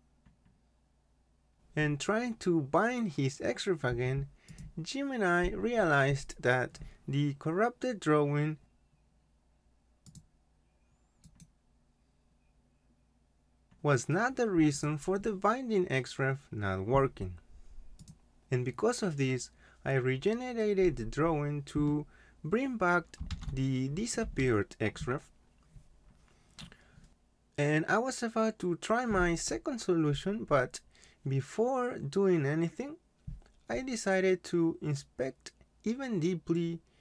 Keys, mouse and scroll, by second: 4.5 click, 10.0 click, 11.2 right click, 14.9 click, 18.0 click, 23.0-24.2 typing.